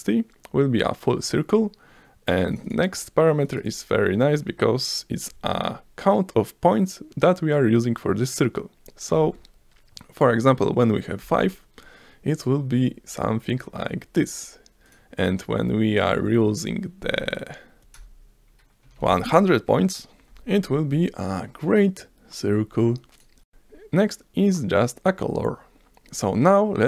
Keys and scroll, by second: 9.1 5, 11.2 F5, 17.8 Right, 17.9-19.4 typing, 20.2 F5.